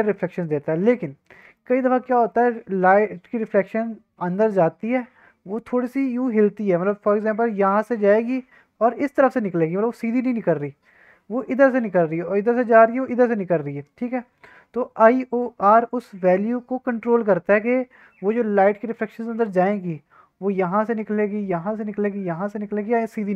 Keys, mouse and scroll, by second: 0.0-1.4 middle drag, 1.6 middle click, 1.7-2.0 drag, 2.0 middle click, 2.3 shift+middle drag, 2.5-3.0 middle drag, 3.5 middle drag, 3.6 scroll down 1.